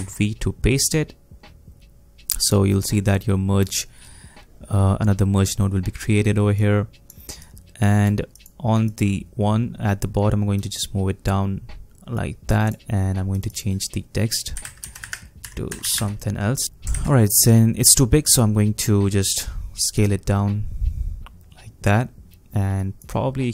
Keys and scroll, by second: 0.0 ctrl+v, 14.3-16.8 typing, 16.9 ctrl+a.